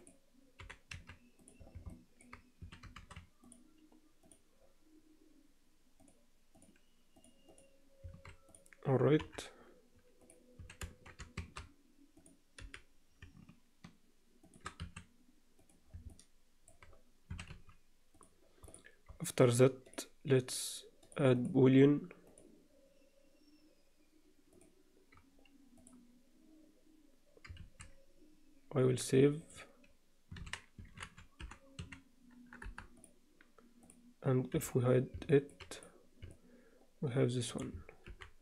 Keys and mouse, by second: 0.6 g, 1.9-2.2 middle drag, 2.6 s, 4.2 click, 6.1 drag, 7.5 click, 8.2 alt+a, 9.2 KP_7, 10.2 drag, 10.6 s, 12.6 g, 14.8 s, 16.1-16.7 middle drag, 17.3 s, 19.9 drag, 21.3-22.4 drag, 24.5 click, 27.7 ctrl+s, 33.8 click, 34.5 h, 35.3 middle click, 35.7 click, 36.3-37.6 alt+middle drag, 38.1 alt+h.